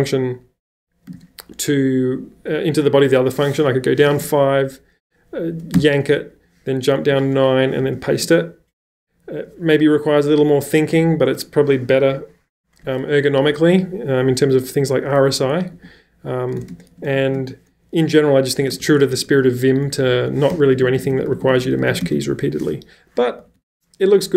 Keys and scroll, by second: 1.1 shift+v, 3.7 5, 4.0 j, 5.7-7.8 typing, 15.7-22.2 typing, 23.4 ⟲.